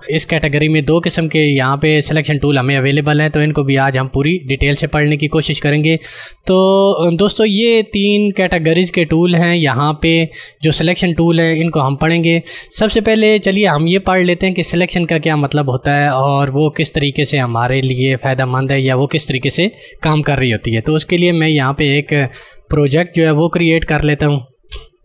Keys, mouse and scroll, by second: 17.9 click, 22.9 click.